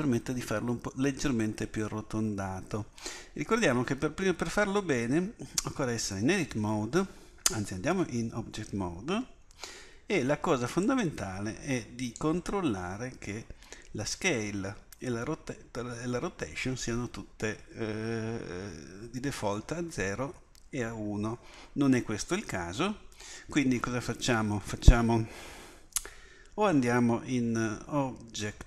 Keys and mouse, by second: 7.9 Tab, 10.8-13.9 drag.